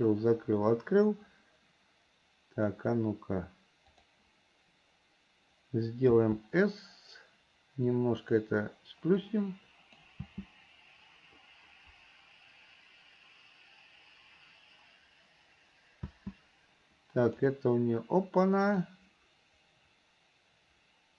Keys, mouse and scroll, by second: 4.2 click, 9.5 click, 17.5 click, 19.1-21.1 drag.